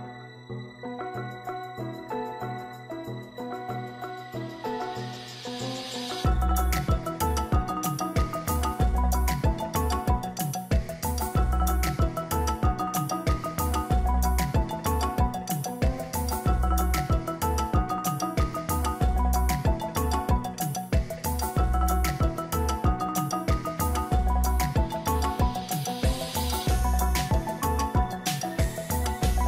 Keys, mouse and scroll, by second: 0.6 shift+click, 4.3 ctrl+click, 6.6 ctrl+a, 9.5 ctrl+d, 11.1 double click.